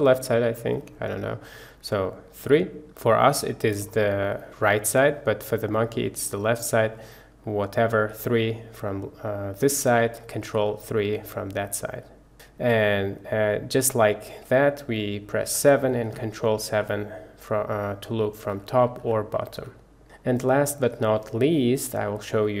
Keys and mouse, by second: 2.5 KP_3, 3.4-3.9 middle drag, 4.2 middle click, 5.4 middle click, 6.8 middle click, 8.2 KP_3, 10.5 ctrl+KP_3, 12.3 KP_3, 12.3 KP_1, 15.5 KP_7, 16.1 ctrl+KP_7, 16.9 KP_7, 18.6 KP_7, 19.6 ctrl+KP_7, 20.5-20.9 middle drag, 21.1 shift+middle click, 21.4-22.6 middle drag.